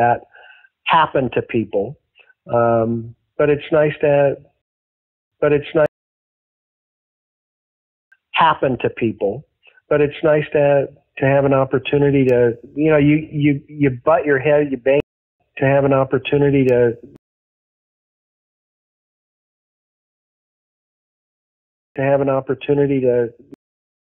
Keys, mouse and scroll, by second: 3.1-4.5 drag, 4.5 space, 5.0 ctrl+shift+Delete, 5.2 space, 5.8 space, 6.2 click, 7.1 click, 7.9 click, 8.0 space, 8.7 ctrl+s, 12.5-14.1 drag, 14.6 click, 14.9 space, 15.2 click, 15.4 space, 17.1 space, 17.4 click, 17.6 click, 18.5 click, 20.2 shift+click, 21.8 click, 21.9 space, 23.4 space, 23.6 click, 23.8 click.